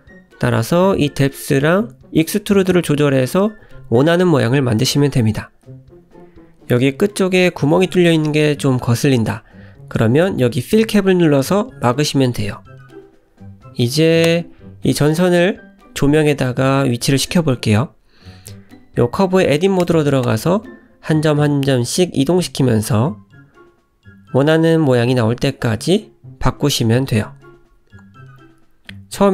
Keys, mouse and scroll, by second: 3.6 shift+middle click, 4.2 middle click, 6.7 scroll up 2, 7.1 middle click, 8.6 click, 9.1 click, 9.7 click, 10.2-10.7 scroll down 3, 10.7 middle click, 12.4 Tab, 13.1 Tab, 14.4 shift+middle click, 15.0 click, 16.3 click, 17.7 Tab, 18.2 click, 18.6 g, 20.6 click, 21.1 g, 22.5 click, 23.3 click, 23.7 g, 24.9 click, 25.5 g, 27.6 middle click, 28.3 `.